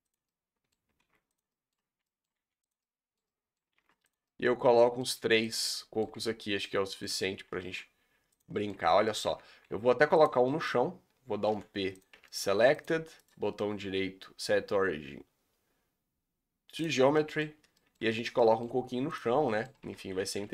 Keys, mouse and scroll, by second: 0.2 middle click, 1.0 shift+d, 1.5 middle click, 2.3 g, 2.9 middle click, 3.7 shift+d, 4.2 middle click, 5.2 g, 5.6 middle click, 6.1 Tab, 6.2 scroll down 5, 6.3 middle click, 7.0-7.5 scroll up 3, 7.6 shift+d, 8.5 middle click, 8.7 Tab, 8.9 scroll down 4, 9.0 middle click, 9.3 Tab, 9.6 shift+d, 10.4 shift+middle drag, 10.7-11.1 scroll up 2, 12.0 p, 12.1 Tab, 12.3-12.9 middle drag, 12.9 click, 17.1-17.6 middle drag, 17.6 scroll down 3, 17.7-19.2 middle drag, 19.2 click, 19.3 scroll down 1, 19.5-19.9 middle drag, 19.9 shift+d, 20.3 g.